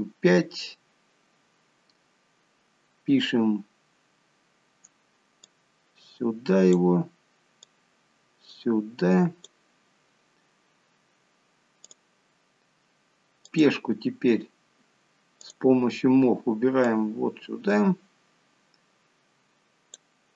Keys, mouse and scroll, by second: 1.0-1.5 scroll down 1, 5.7 click, 8.0 click, 10.2 scroll up 4, 12.2 click, 13.8 click, 15.7 click, 17.2 click.